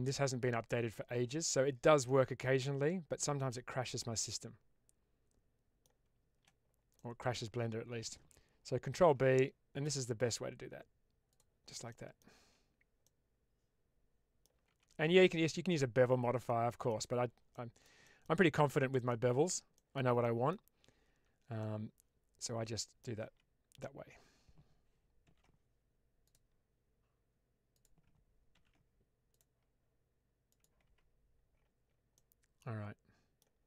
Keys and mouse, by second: 0.0-1.3 drag, 1.9-5.8 middle drag, 6.8 middle click, 8.9 ctrl+b, 11.8 middle click, 12.2 Tab, 12.9-14.3 middle drag, 14.6 Tab, 15.6 middle click, 16.6 shift+middle click, 17.4 middle click, 18.0 shift+middle click, 19.0 middle click, 19.6 shift+middle click, 20.1 middle click, 21.0 Tab, 21.5-22.9 middle drag, 23.1 Tab, 25.1 ctrl+r, 27.6 click, 28.4 ctrl+r, 30.4 click, 30.7 Tab, 32.0-33.3 middle drag.